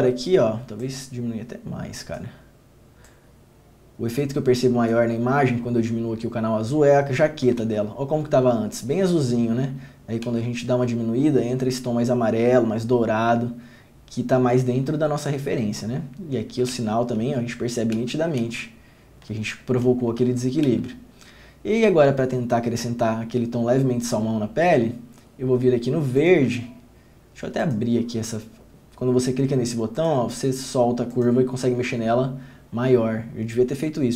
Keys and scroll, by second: 7.8 ctrl+d, 10.4 ctrl+d, 17.4 ctrl+d, 18.1 ctrl+d, 18.6 ctrl+d, 20.4 ctrl+d, 20.8 ctrl+d.